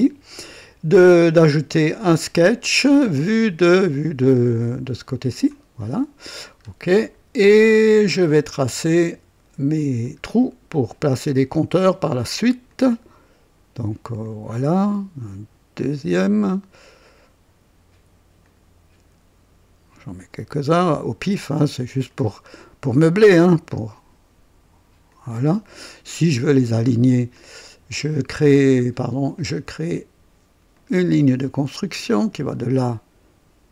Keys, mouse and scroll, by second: 1.7 click, 2.6-2.9 scroll down 1, 3.6-4.3 drag, 5.2 click, 6.6-6.9 scroll up 1, 7.1-7.5 scroll up 1, 7.6-8.5 right drag, 10.0 click, 12.6 click, 14.2 click, 16.1 click, 18.4 click, 20.3 click, 22.0 click, 23.5 click, 25.0 click, 25.6 right click, 27.3 click, 29.3 click, 30.7 click, 32.3 click.